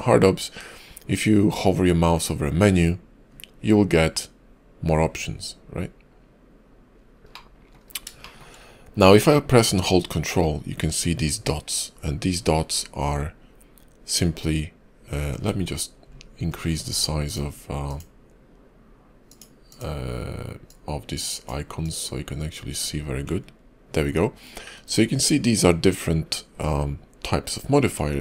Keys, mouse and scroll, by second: 7.2 middle click, 7.7 scroll up 2, 8.1 shift+middle click, 17.1 click, 17.7 click.